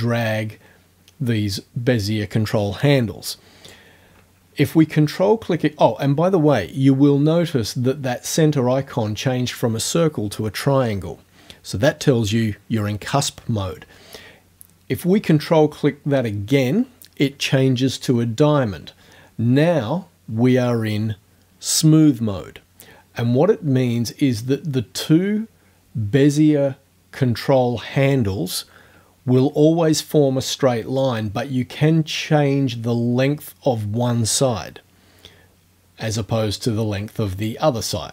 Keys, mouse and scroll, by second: 31.1-37.6 drag.